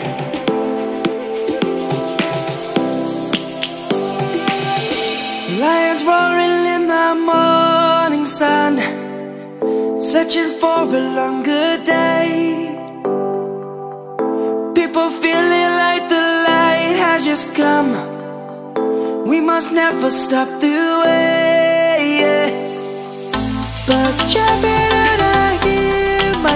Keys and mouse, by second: 0.7 shift+a, 4.5 shift+a, 6.0 click, 7.6 s, 8.7 right click, 9.3 s, 12.4 shift+middle click, 14.4 middle click, 15.6 click, 17.9 shift+middle click, 18.5 s, 20.8 click, 25.7 right click.